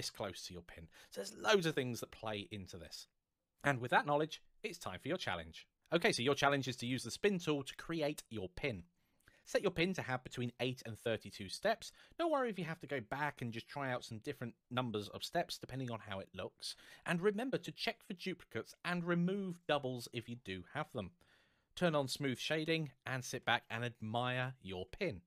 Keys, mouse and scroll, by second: 2.5-3.2 scroll down 1.